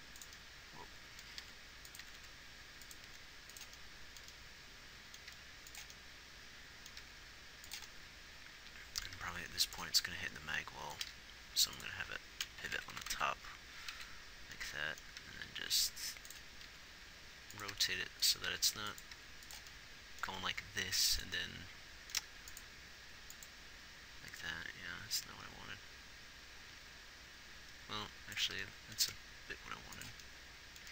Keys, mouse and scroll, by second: 1.8 r, 2.4 r, 5.8 g, 7.4 g, 13.1-13.5 Right, 14.4 Right, 15.6 g, 17.0 r, 18.1 g, 18.9 r, 19.5 g, 20.6 g, 22.6 g.